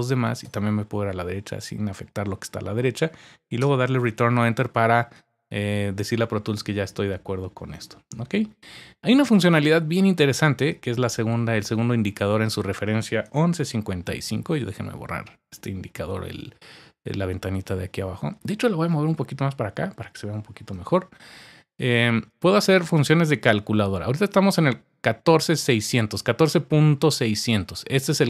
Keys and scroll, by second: 0.4 Right, 1.0 Up, 1.2 Up, 1.9-2.3 typing, 3.6 typing.